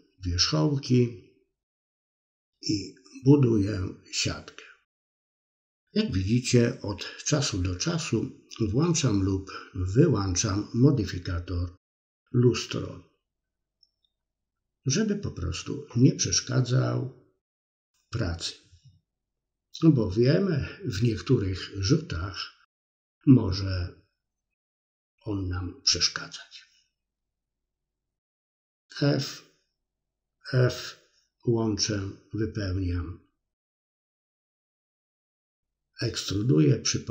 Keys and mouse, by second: 0.0 middle click, 0.4-1.5 middle drag, 1.9 click, 2.2 middle click, 2.6 middle click, 3.5 middle click, 5.1-6.3 ctrl+drag, 6.4 middle click, 7.3 click, 7.8 click, 8.2 middle click, 9.0 click, 9.8 middle click, 10.8 click, 11.1 click, 11.9 middle click, 13.2-15.1 middle drag, 16.0 click, 16.8 middle click, 17.7 click, 18.0 shift+click, 18.9 f, 19.1 middle click, 21.9 d, 22.3 f, 22.4 middle click, 24.4 f, 24.5 middle click, 24.9 middle click, 25.2 shift+middle click, 25.3 middle click, 25.9 click, 26.7 shift+click, 27.2 f, 27.4 middle click, 28.0 middle click, 28.8-30.1 shift+drag, 30.1 f, 30.2-31.8 middle drag, 32.4 middle click, 33.1 click, 34.4 click, 35.4 middle click, 35.7 click, 36.2-37.1 middle drag.